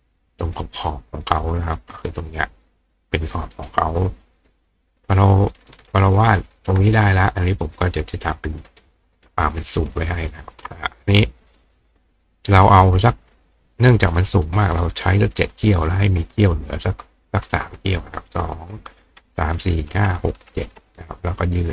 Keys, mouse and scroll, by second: 0.4 click, 0.8 right click, 1.8 click, 3.5 right click, 5.1-6.1 drag, 7.6 click, 7.9 click, 8.2 click, 9.2-10.5 drag, 12.1 click, 13.6 click, 15.8-17.4 drag, 16.2 right click, 21.2-21.7 drag.